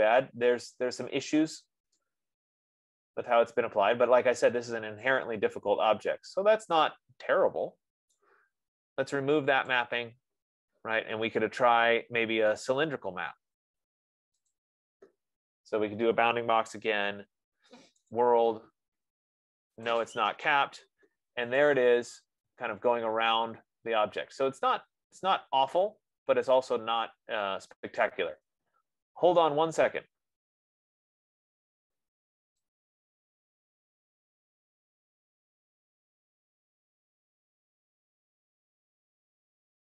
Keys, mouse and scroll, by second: 0.3 right click, 0.9 middle click, 8.4 right click, 10.2 click, 14.9 click, 17.1 Return, 18.5 click, 20.5 click, 23.7-25.5 drag, 28.5-33.3 right drag, 36.4 F15.